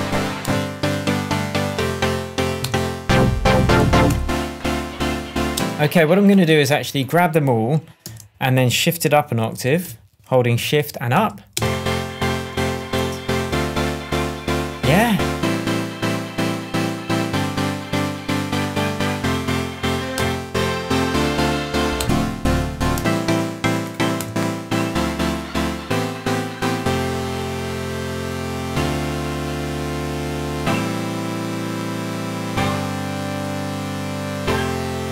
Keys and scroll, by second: 0.1 Down, 0.4 Return, 2.3 Down, 2.5 Return, 3.7 Down, 4.0 Return, 5.5 space, 8.0 alt+a, 9.5 super+a, 11.1 shift+Up, 11.5 shift+space, 12.3 space, 12.5 shift+Tab, 20.1 Return, 21.6 Down, 21.9 Return, 22.5 Down, 22.9 Return, 23.9 Return.